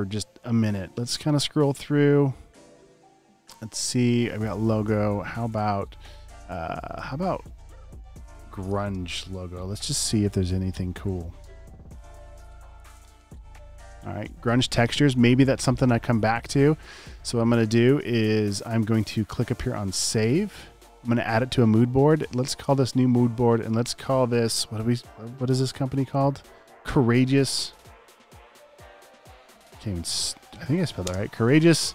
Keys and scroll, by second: 8.1-9.1 typing, 27.3-28.2 typing.